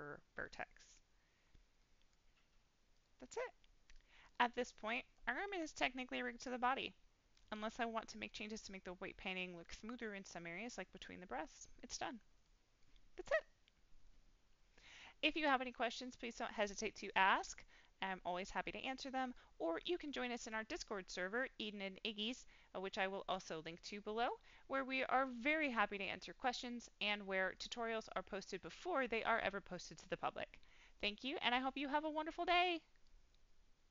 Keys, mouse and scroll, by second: 1.4-1.7 scroll down 1, 1.7 middle click, 2.9-3.4 drag, 3.8-4.2 middle drag, 4.5 scroll down 1, 4.8 middle drag, 6.2-8.2 middle drag, 8.2-8.5 scroll down 1, 8.7-9.8 scroll up 4, 9.6 middle click, 12.4 middle click, 17.4-20.0 middle drag.